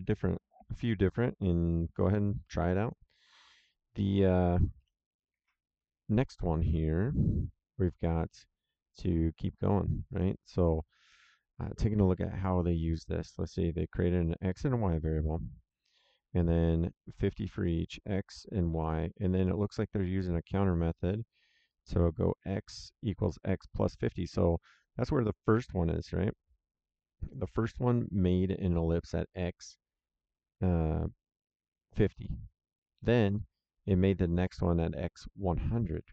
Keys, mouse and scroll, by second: 4.7 ctrl+Page_Down, 9.6 click, 28.8 click.